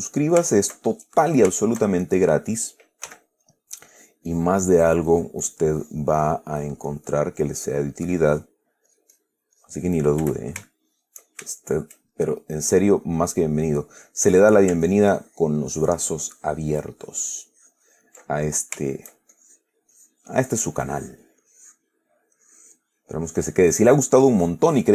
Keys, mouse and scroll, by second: 0.0 click, 0.2 click, 0.8 shift+click, 1.9 shift+click, 3.4 f, 3.8 click, 4.2 click, 7.7 click, 8.4 click, 9.2 click, 9.9 click, 11.0 shift+click, 11.8 shift+click, 12.4-14.7 shift+drag, 15.2-18.5 ctrl+drag, 18.6 ctrl+click, 19.4 ctrl+shift+click, 19.6 ctrl+shift+click, 20.2 click, 21.6 middle click, 21.7 click, 22.3 middle click, 22.7 click, 23.3 middle click, 23.5 click, 23.9-24.9 middle drag.